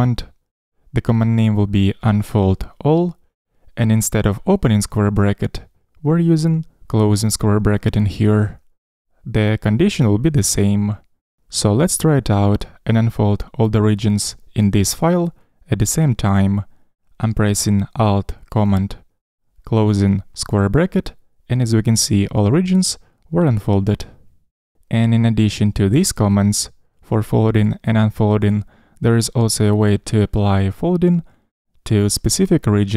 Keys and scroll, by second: 19.8 alt+super+].